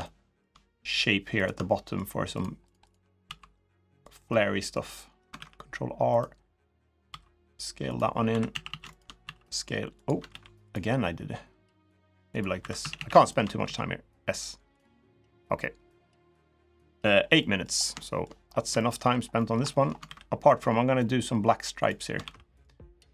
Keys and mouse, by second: 1.5 middle click, 2.4 shift+click, 2.6 shift+click, 3.0 s, 4.0 middle click, 5.1 ctrl+r, 6.8 s, 8.0 2, 8.3 a, 8.4 a, 9.0 s, 10.0 ctrl+r, 12.3 2, 12.6 a, 12.7 a, 13.0 alt+shift+click, 13.4 s, 15.1-16.6 drag, 17.1 middle click, 17.7 shift+middle click, 18.5 shift+middle click, 19.1 middle click, 19.4 shift+middle click, 19.8 ctrl+r.